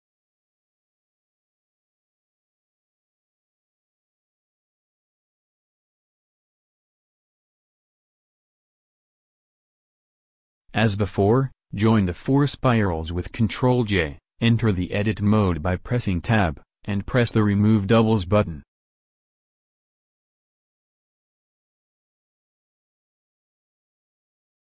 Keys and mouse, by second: 3.0-4.1 drag, 7.2-11.0 drag, 11.0 b, 14.2 ctrl+j, 15.2 Tab, 16.8-21.3 drag, 18.1 a.